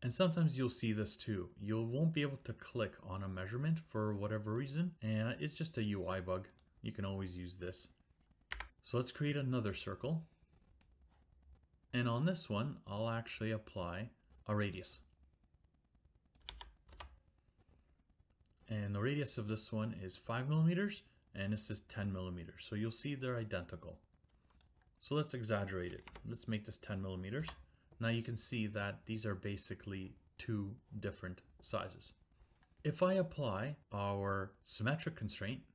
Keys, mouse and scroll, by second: 4.7 click, 6.6 click, 8.5 Delete, 10.8 click, 11.9 click, 13.8 click, 14.7 click, 16.5-16.9 typing, 16.9 Return, 24.3 Escape, 24.5 click, 24.6 click, 25.6-26.5 typing, 27.4 Return, 35.4 click.